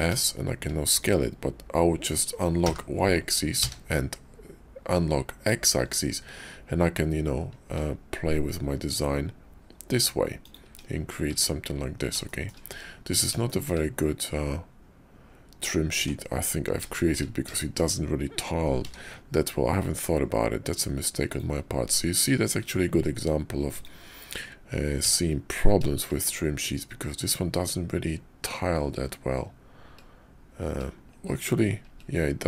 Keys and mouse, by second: 11.3 Tab, 12.2 shift+middle drag, 13.4 shift+click, 15.9 Tab, 16.9 shift+middle click, 17.6 shift+middle drag, 18.7 d.